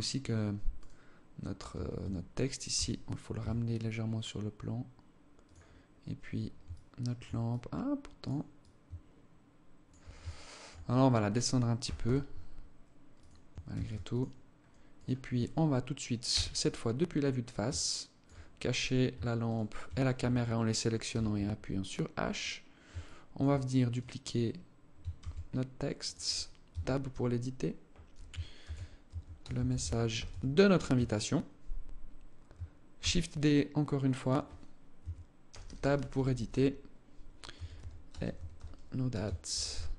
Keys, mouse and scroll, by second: 0.2 right click, 1.2 Tab, 1.5 Tab, 2.2 g, 5.2-5.7 scroll down 6, 6.2 alt+shift+click, 7.0 alt+click, 8.1 alt+click, 9.7 alt+shift+click, 10.6 right click, 11.3 g, 13.3 ctrl+s, 14.6 right click, 15.8 KP_1, 16.6 scroll up 1, 17.2 alt+shift+click, 18.3 right click, 18.9 shift+right click, 20.6 h, 21.1-21.9 scroll up 3, 21.9-22.3 scroll down 3, 22.5 alt+shift+click, 23.4 right click, 24.7 shift+d, 26.2 Tab, 26.6-29.8 typing, 30.4 Tab, 32.5 shift+d, 34.5 Tab, 35.0-36.0 typing, 37.0-39.4 typing.